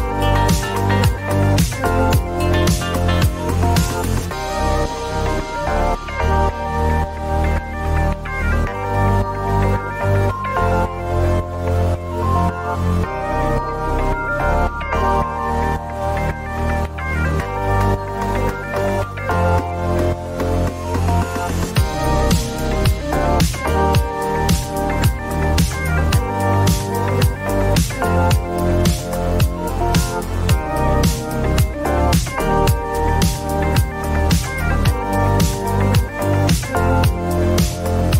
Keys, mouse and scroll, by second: 0.2-1.2 typing, 1.5 Return, 4.4-5.3 typing, 11.2-12.1 typing, 12.5 Return, 15.1-15.8 typing, 33.3-35.1 typing.